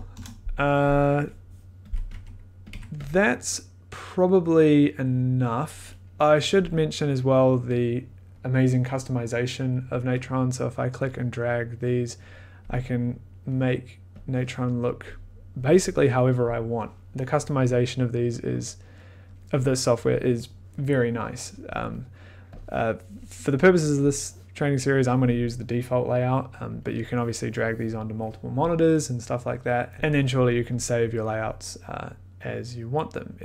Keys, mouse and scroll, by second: 0.0-0.1 typing, 1.3 click, 2.1 click, 2.7 click, 2.7 1, 3.0 click, 7.8 click, 12.6 click, 15.1 click, 23.1 click, 24.8 click, 29.9 click, 30.8 click.